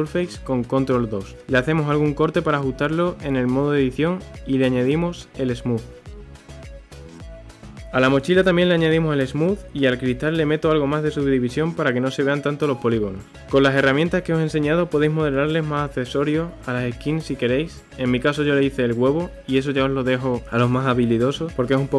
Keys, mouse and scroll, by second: 0.5-0.8 scroll up 1, 1.6 ctrl+r, 4.8 Tab, 5.7 right click, 7.7 click, 8.2 right click, 9.7 scroll up 3, 9.9 click, 10.1 Tab, 10.6-12.0 middle drag, 12.2 click, 12.4 click, 12.8 Tab, 12.9 scroll down 1, 13.0-15.6 middle drag, 19.5-20.6 scroll down 1, 20.6-21.9 scroll down 1.